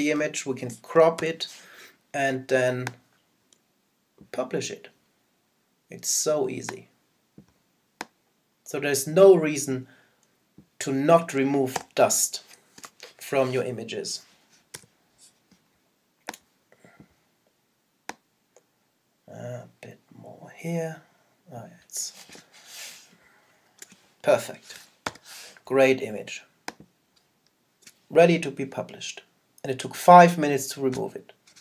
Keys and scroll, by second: 12.8 Return, 22.3 Return, 25.0 super+0.